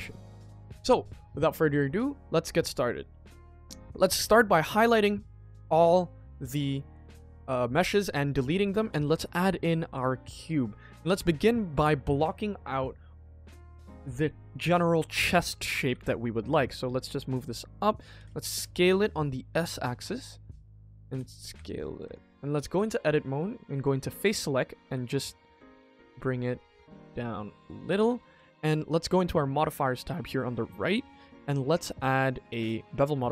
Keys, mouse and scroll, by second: 2.6-2.9 drag, 3.3 x, 3.9 shift+middle drag, 7.6-8.1 scroll up 1, 8.2 shift+middle drag, 8.8 shift+a, 10.6 KP_1, 11.0 scroll up 2, 11.4 shift+middle click, 12.8 shift+middle drag, 20.2-20.6 middle drag, 20.9 s, 21.8 middle click, 22.0 Tab, 22.5 middle click, 23.7 click, 24.2 click, 24.8 g, 26.1 KP_1, 26.6 g, 27.8 Tab, 28.1 middle drag, 28.5-29.0 scroll up 1, 29.0 click, 29.4 middle click, 30.9-32.4 drag, 32.8 middle click.